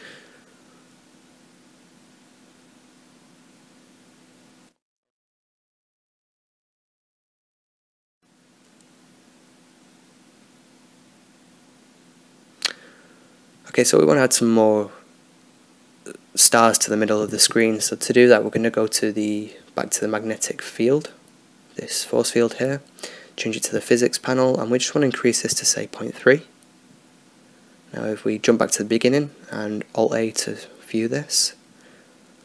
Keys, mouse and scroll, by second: 10.8-19.0 drag, 18.4 middle click, 19.0-21.7 middle drag, 19.7 click, 21.7-24.0 drag, 24.0-26.7 right drag, 25.3-28.5 drag, 30.2-31.7 drag, 31.2-32.4 right drag, 32.0 alt+a.